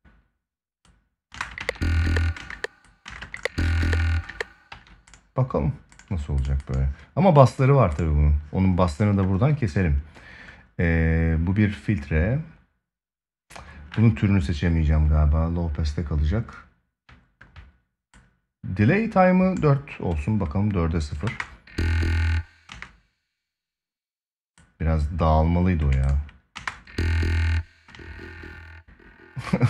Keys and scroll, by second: 1.1 space, 1.3 ctrl+s, 2.1 space, 4.0 space, 4.4 ctrl+s, 21.0 space, 22.4 space, 26.3 space, 27.6 space.